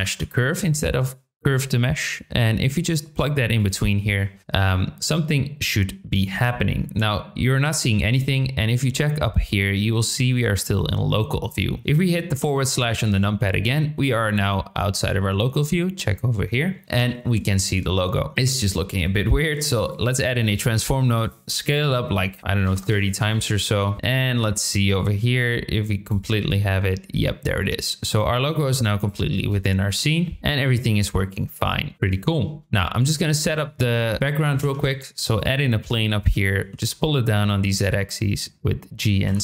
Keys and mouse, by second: 18.3 shift+a, 21.0-23.2 drag, 25.0 click, 29.0 click, 29.3 space, 30.2 middle drag, 31.0-31.8 middle drag, 31.9 space, 31.9 KP_7, 34.6 shift+a, 35.9-36.3 drag, 36.5 g, 36.8 z, 37.3 click.